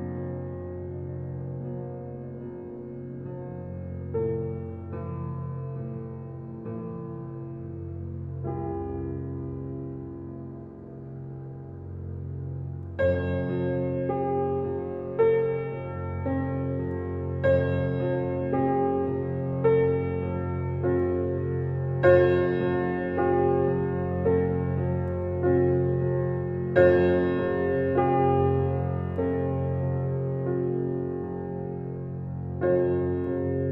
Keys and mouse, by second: 1.2 click, 1.9 click, 2.2 click, 2.6 click, 3.1 click, 3.7 click, 5.5 click, 6.0 click, 6.6 click, 7.5 click, 8.2 click, 8.7 click, 10.0 click, 10.5 click, 11.1 click, 12.2 click, 13.1 click, 14.1 click, 15.0 click, 15.8 click, 16.0 click, 18.0 ctrl+,, 19.7 click, 20.6 click, 22.0 click, 22.7-23.7 drag, 24.7 click, 26.3-27.5 drag, 28.7 click, 29.3 click, 30.5 ctrl+,, 32.0 ctrl+alt+a, 32.7 Escape, 33.6-33.7 drag.